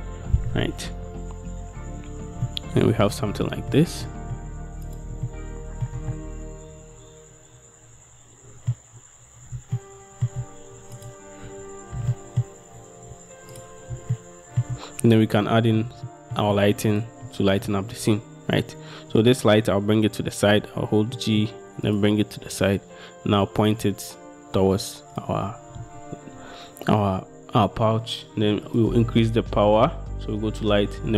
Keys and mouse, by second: 2.6 shift+drag, 3.6-5.1 drag, 5.4-6.1 shift+drag, 6.3 click, 12.1 g, 12.2 click, 14.3-14.8 shift+drag, 15.7 middle drag, 16.2-16.6 shift+middle drag, 20.7 g, 23.0 click, 28.8-31.1 middle drag.